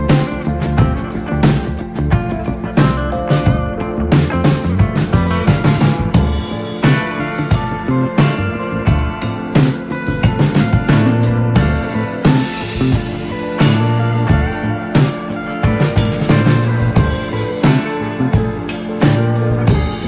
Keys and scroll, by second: 1.4 x, 4.4 space, 5.2 ctrl+space, 5.4 Escape, 6.0-8.1 typing, 10.5 space, 11.8 Escape, 11.9 space, 14.0 space, 15.7 Escape, 15.8-20.0 typing.